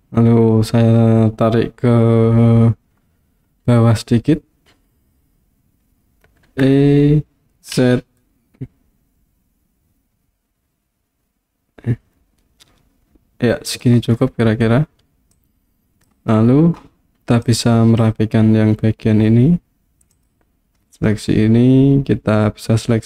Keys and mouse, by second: 6.5 e, 7.8 z, 13.7 click, 15.4 click, 17.5 click, 20.2 click.